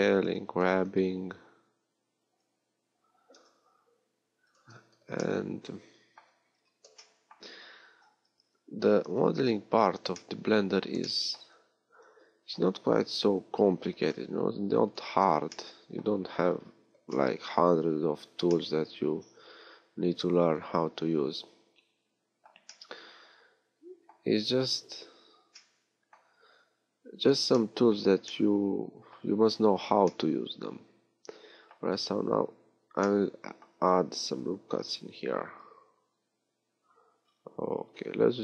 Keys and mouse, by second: 0.2 middle click, 0.4 g, 0.6-3.8 middle drag, 8.0 a, 12.1 g, 19.8 middle click, 20.1 middle click, 21.4 middle click, 21.8 middle click, 26.3 a, 26.8 a, 34.2 ctrl+r.